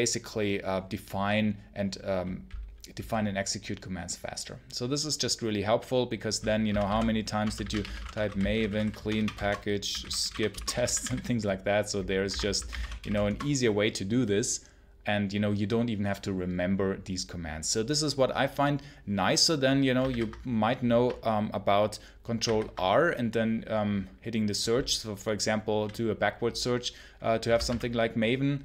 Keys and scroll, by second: 6.3-13.4 typing, 19.9 ctrl+c, 22.3 ctrl+r, 27.1-28.6 typing.